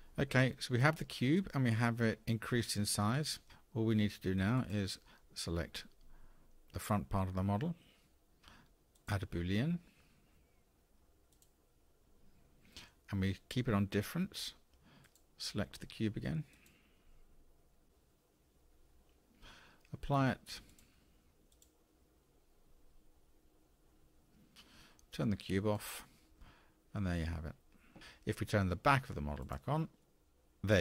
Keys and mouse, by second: 4.5 click, 15.0 click, 20.6-23.7 drag, 25.7 click, 29.4 click, 30.1-30.7 middle drag.